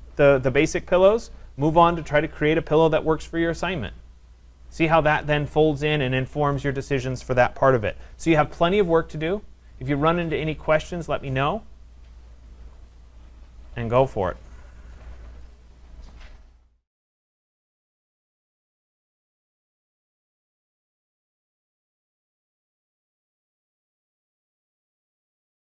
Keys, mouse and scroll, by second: 15.9 click.